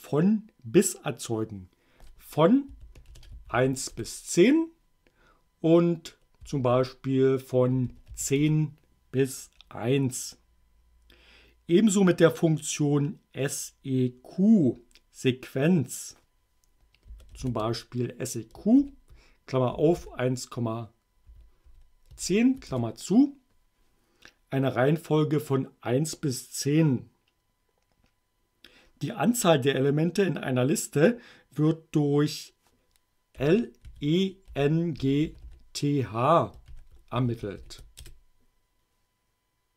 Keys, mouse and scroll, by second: 2.5-4.1 typing, 6.2-8.6 typing, 17.1 s, 17.4 e, 18.8-22.2 typing, 22.7 shift+Return, 33.4-38.1 typing.